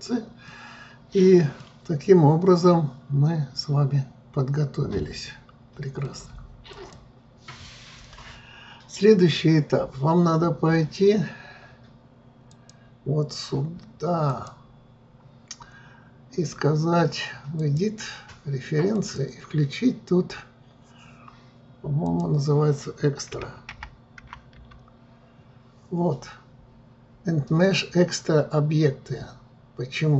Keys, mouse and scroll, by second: 0.2 scroll down 2, 0.6-1.3 middle drag, 1.3-1.8 scroll down 2, 1.8-4.8 middle drag, 6.8-9.9 drag, 12.7-30.1 drag.